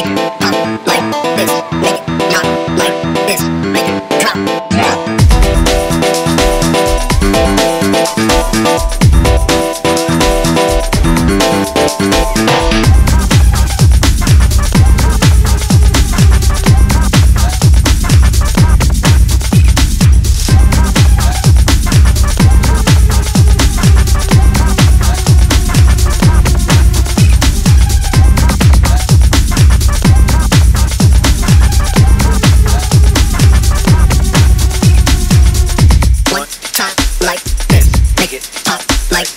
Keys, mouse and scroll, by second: 0.5 e, 3.9 scroll up 1, 4.0 click, 4.8 ctrl+r, 5.3 click, 5.5 scroll down 3, 5.7 click, 6.5 scroll up 2, 6.7 click, 7.0 ctrl+z, 7.3 ctrl+z, 7.5 ctrl+r, 8.0 click, 8.3 click, 8.7 scroll down 2, 8.9-9.7 scroll up 1, 9.7 click, 10.3 click, 10.7 alt+shift+click, 11.2 e, 11.9 scroll down 2, 12.1 click, 12.5 ctrl+z, 12.9 f, 13.5 i, 14.3 x, 15.3 click, 15.6 scroll down 1, 15.9 KP_7, 16.1 KP_1, 18.3 ctrl+z, 18.5 ctrl+z, 19.1 click, 19.5 scroll up 1, 20.0 ctrl+z, 20.4 scroll down 1, 20.5 click, 21.0 KP_7, 21.1 KP_1, 22.0 e, 23.1 s, 23.8 click, 24.0 scroll up 1, 24.1 click, 24.8 click, 28.3 f, 29.2 alt+shift+click, 29.6 click, 30.7 f, 31.0 i, 31.7 click, 32.8 alt+shift+click, 33.2 click, 34.3 scroll down 1, 34.4 click, 35.1 click, 35.4-36.5 drag, 37.9 click, 38.2 shift+click, 38.5 shift+click, 38.6 shift+click, 39.0 click.